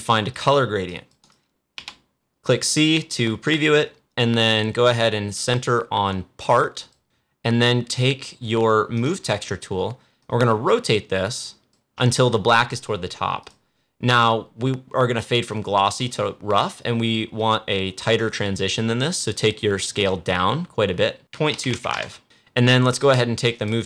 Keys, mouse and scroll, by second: 0.2 click, 1.7 c, 6.7 click, 8.8-13.3 drag, 20.1 click, 23.5-23.8 drag.